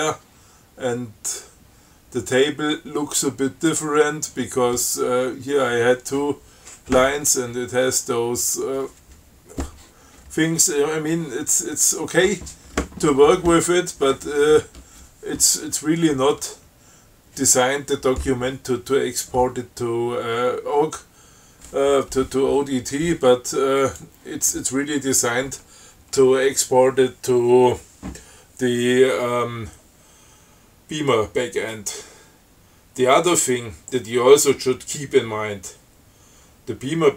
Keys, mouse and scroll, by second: 0.0-0.4 scroll down 2, 4.2 scroll down 2, 10.3 scroll up 2, 11.2 scroll up 2, 11.8 scroll up 2, 24.1 click.